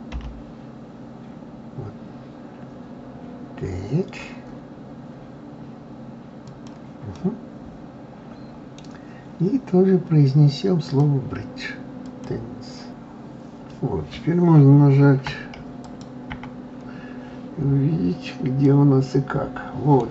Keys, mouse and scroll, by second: 7.1-10.2 middle drag, 10.9-12.9 drag, 15.8 click, 16.3 KP_Divide, 17.1-17.8 scroll down 2, 17.8-18.3 scroll up 2, 18.6-20.1 middle drag.